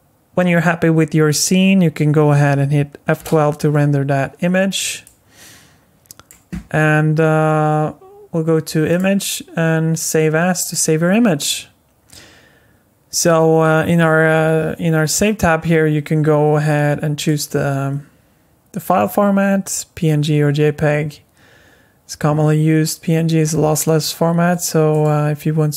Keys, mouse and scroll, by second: 3.6 F12.